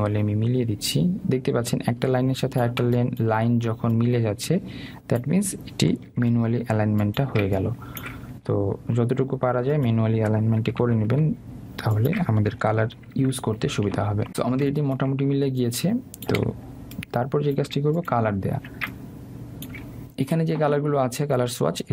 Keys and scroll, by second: 7.2 Left, 11.9 Right.